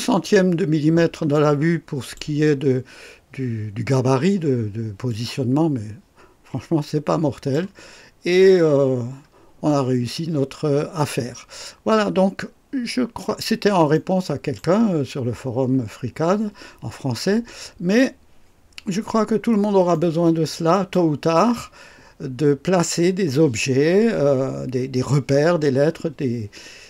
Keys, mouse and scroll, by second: 0.2 scroll down 2, 1.3-2.3 drag, 5.1-7.7 drag, 8.5 scroll up 1, 8.9 scroll down 1, 9.7-13.4 drag, 13.9-14.8 right drag, 14.9-15.3 scroll up 1, 19.9-21.1 right drag.